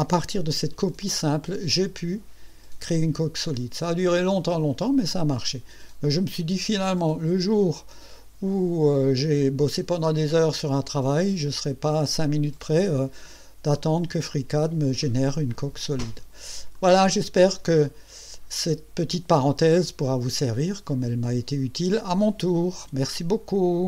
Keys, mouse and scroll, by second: 6.2-7.4 drag, 7.7-10.7 drag, 11.1-14.9 drag, 15.6-16.5 drag, 16.7-17.9 drag, 18.1-19.1 drag, 19.6-21.0 drag.